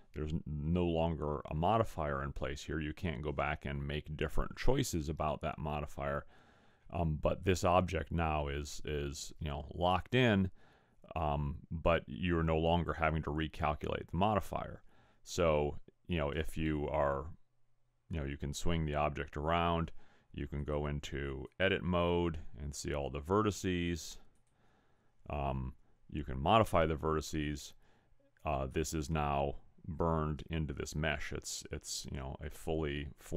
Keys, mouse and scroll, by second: 16.6 middle click, 20.5 click, 23.9 click, 27.5 middle click.